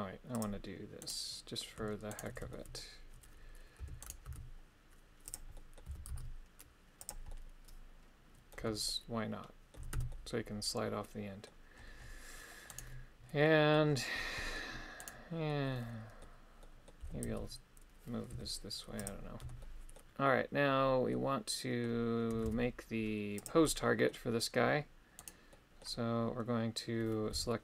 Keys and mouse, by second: 0.4 click, 2.2 shift+right click, 2.6 shift+middle click, 3.8 e, 4.3 s, 5.3 click, 5.6 middle click, 5.9 g, 6.2 z, 7.0 click, 7.3-8.6 middle drag, 8.6 Tab, 8.9 middle click, 9.8 a, 10.0 a, 10.2-11.6 middle drag, 12.8 right click, 13.5 middle click, 14.4 middle click, 15.1 right click, 15.5 middle click, 16.7 middle click, 17.1 g, 17.3 x, 18.4 y, 19.0 click, 19.5 KP_1, 19.7 middle click, 21.2 middle click, 22.5 shift+d, 23.4 click, 23.7 middle click, 25.3 right click, 25.6 middle click, 27.4 g.